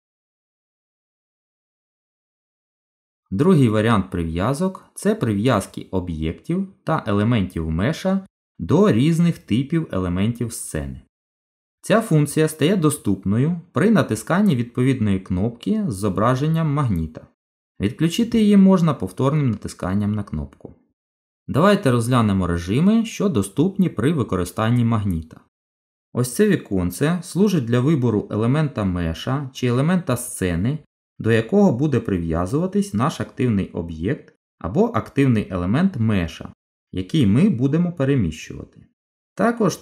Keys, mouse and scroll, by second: 16.8 click, 19.6 click, 24.1 click, 26.1 click.